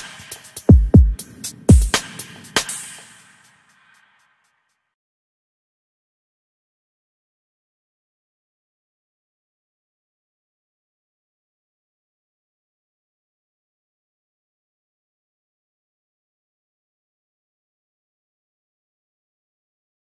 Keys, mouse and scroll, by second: 0.1 Tab, 1.2 Tab, 4.1 click, 5.7-11.9 middle drag.